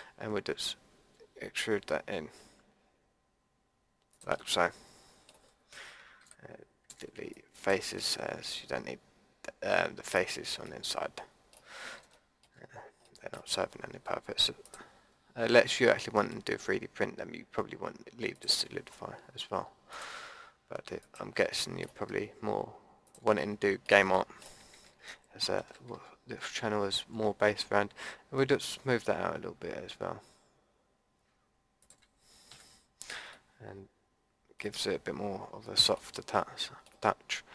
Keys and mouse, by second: 4.4 middle click, 6.2 Delete, 11.7 middle click, 12.3 click, 12.3 middle click, 14.6-18.3 middle drag, 18.3-21.5 drag, 21.5 middle click, 21.8-25.5 drag, 25.6 ctrl+b, 32.5 a, 32.7 middle click, 33.1 Tab, 34.7 Tab.